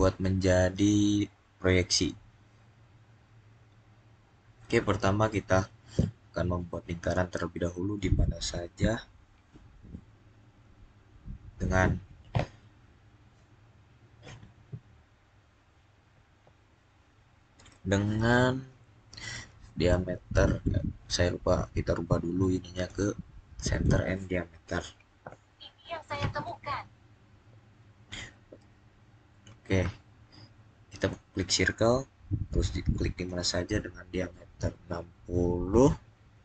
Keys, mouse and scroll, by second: 6.9-8.8 scroll up 1, 8.8 click, 22.6 click, 30.8 click, 33.0 click, 36.2-36.4 typing.